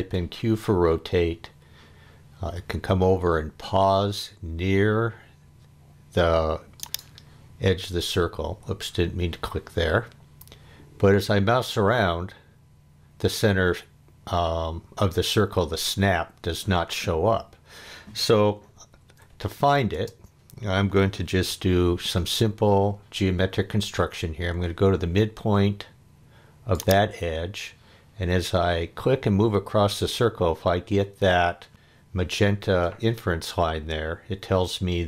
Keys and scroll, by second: 0.0 q, 8.4 Escape, 19.1 Escape, 19.9 space, 21.3 l.